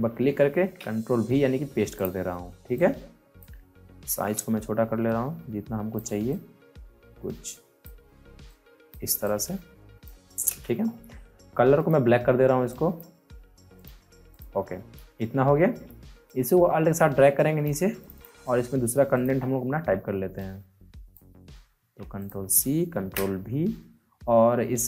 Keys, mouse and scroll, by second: 0.5 v, 1.9 click, 1.9 click, 3.9 t, 5.0-10.5 drag, 10.5 Return, 11.7 click, 14.7 alt+scroll up 1, 15.1 alt+scroll down 1, 16.3-21.7 alt+drag, 21.7 ctrl+c, 22.1 click, 22.2 click, 22.9 ctrl+v.